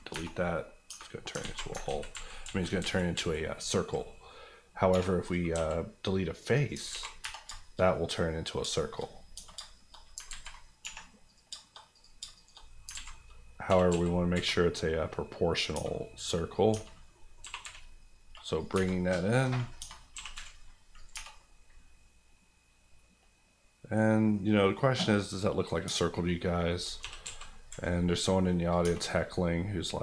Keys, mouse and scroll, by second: 0.1 Tab, 1.3 alt+Tab, 1.4 alt+z, 4.0 z, 4.2 middle click, 4.9 3, 5.2 click, 5.5 x, 6.0 click, 6.7 alt+click, 6.9 alt+z, 7.2 Tab, 7.5 shift+middle click, 7.7 middle click, 7.8 scroll up 1, 7.9 middle click, 8.4 scroll down 2, 8.7 shift+middle click, 9.0 middle click, 9.1 scroll up 1, 9.3 Tab, 9.6 shift+middle click, 10.0 middle click, 10.1 alt+middle click, 10.2 alt+z, 10.8 1, 11.3 click, 11.5 shift+click, 11.8 click, 12.2 shift+click, 12.6 click, 12.7 KP_Decimal, 12.9 alt+z, 13.1-13.4 scroll down 1, 13.7 g, 13.9 x, 14.3 y, 15.5 click, 15.7 Tab, 15.9 middle click, 16.7 Tab, 17.1 middle click, 17.4 g, 17.6 y, 18.5 click, 18.7 Tab, 19.0 middle click, 19.7 Tab, 20.1 g, 20.3 y, 20.9 click, 21.1 Tab, 21.3 middle click, 25.8 scroll up 1, 25.8 Tab, 26.2 middle click, 27.0 g, 27.2 x, 27.7 y, 28.7 click, 28.8 Tab, 29.0 scroll down 1, 29.3 middle click.